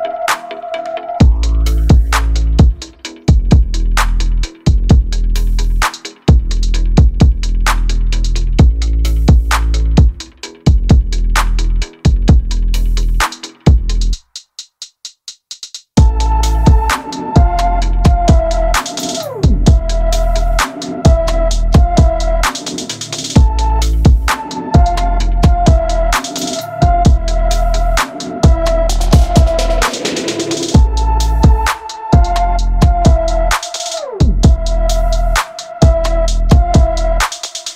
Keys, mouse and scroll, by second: 0.0 middle click, 1.3 middle click, 1.6 shift+click, 1.7 middle click, 2.0 middle click, 2.4 g, 2.7 middle click, 2.8 g, 2.9 middle click, 3.2 middle click, 3.3 KP_3, 3.6 scroll down 2, 3.6 middle click, 3.8 click, 3.9 middle click, 4.3 middle click, 4.6 a, 4.7 middle click, 4.7 shift+click, 4.9 middle click, 5.2 shift+click, 5.5 alt+shift+click, 5.6 middle click, 5.9 a, 6.4 scroll up 1, 6.4 click, 6.5 middle click, 6.7 shift+click, 6.7 alt+m, 7.2 middle click, 7.6-10.0 typing, 7.7 shift+middle click, 7.9 middle click, 8.0 scroll up 3, 8.0 shift+middle click, 8.7 middle click, 9.1 middle click, 9.1 scroll up 2, 9.3 middle click, 9.4 middle click, 9.6 middle click, 9.7 middle click, 9.8 shift+click, 9.9 ctrl+e, 10.0 middle click, 10.1-10.9 scroll up 2, 10.9-11.4 scroll down 10, 11.4 scroll down 6, 11.5 middle click, 11.8 middle click, 12.0 Tab, 12.2 shift+middle click, 12.3 shift+click, 12.4 middle click, 12.6-14.3 typing, 13.0 middle click, 13.2 middle click, 13.5 middle click, 13.7 middle click, 13.7 click, 13.8 middle click, 14.3 middle click, 14.4 shift+middle click, 14.7 Tab, 14.8 middle click, 15.1 middle click, 15.3 click, 15.3 middle click, 15.5 middle click, 15.9 middle click, 16.1 a, 16.4 Tab, 16.5 click, 17.6 shift+middle click, 17.7 scroll up 1, 17.8 middle click, 17.9 click, 17.9 middle click, 18.2 middle click, 18.3 scroll up 1, 18.4 middle click, 18.5 a, 18.7 shift+middle click, 18.9-19.3 scroll up 1, 19.3 middle click, 20.0 click, 20.3 shift+middle click, 20.4 s, 21.1 middle click, 21.4 Tab, 21.6 shift+middle click, 21.6 scroll up 1, 21.8 middle click, 21.9 click, 21.9-27.3 typing, 22.1 middle click, 22.3 middle click, 22.4 scroll up 1, 22.5 middle click, 22.9 click, 23.0 middle click, 23.1 middle click, 23.7 middle click, 24.1 middle click, 24.4 shift+middle click, 24.7 middle click, 24.8 scroll up 2, 25.1 shift+middle click, 25.1 scroll down 2, 25.3 shift+middle click, 25.5 shift+middle click, 25.8 shift+middle click, 26.1 shift+middle click, 26.2 scroll down 2, 26.4 shift+middle click, 26.6 shift+middle click, 26.8 shift+middle click, 27.2 shift+middle click, 27.6 shift+middle click, 27.8 scroll up 4, 28.1 click, 28.2 shift+middle click, 28.3 g, 28.6 click, 29.1 click, 29.1 a, 29.3 shift+middle click, 29.4 a, 30.6 shift+middle click, 30.6 g, 31.1 middle click, 31.3 scroll up 1, 31.4 shift+middle click, 31.5 a, 31.6 shift+middle click, 31.6 g, 31.9 middle click, 32.8 shift+middle click, 32.8-33.5 scroll up 2, 33.5 middle click, 33.9 middle click, 34.2-37.1 typing, 35.0 shift+middle click, 35.6 shift+middle click, 36.1 shift+middle click, 36.3 shift+middle click, 36.5 shift+middle click, 36.8 shift+middle click, 37.0 shift+middle click.